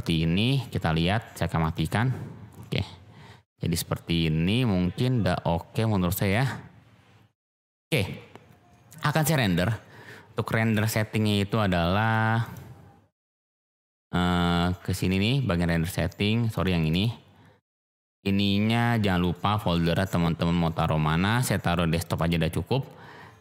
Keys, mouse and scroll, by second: 15.4 click, 19.3-23.4 drag.